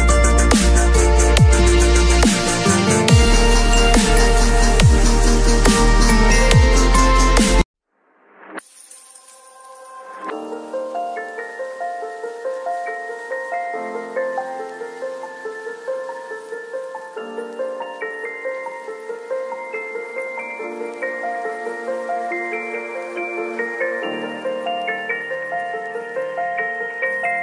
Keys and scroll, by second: 5.1 ctrl+Return, 7.7 alt+Delete, 8.1 ctrl+d, 8.3 v, 14.6 b, 17.3 v, 21.9 Delete, 24.3 space.